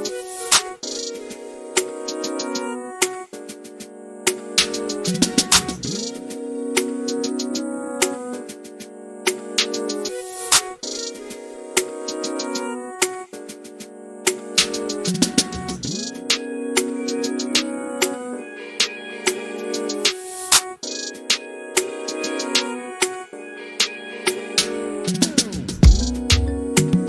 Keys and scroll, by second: 0.2-3.9 typing, 7.6-8.4 typing.